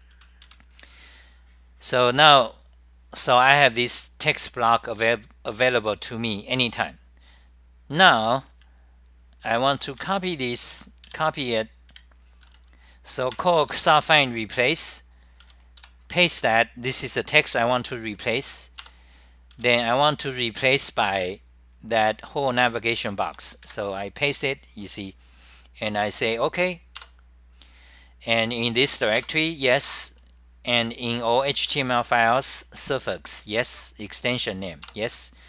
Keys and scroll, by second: 1.4-2.3 typing, 3.6-4.3 typing, 6.5-7.2 typing, 8.7 ctrl+Tab, 9.8-11.7 typing, 12.0 ctrl+shift+Tab, 13.0-13.7 typing, 13.8 ctrl+shift+Tab, 15.4 Home, 15.6-16.9 typing, 18.8-20.1 typing, 22.6-24.3 typing, 25.8-26.5 typing, 27.2 Return, 28.4-32.4 typing, 29.3 Return, 34.3-35.0 typing.